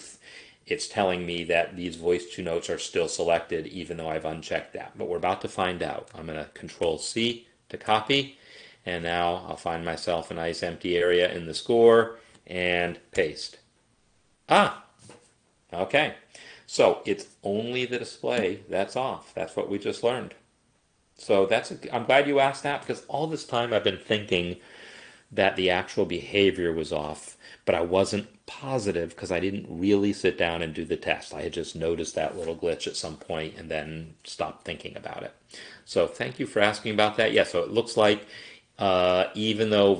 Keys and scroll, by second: 6.8 ctrl+c, 13.2 ctrl+v.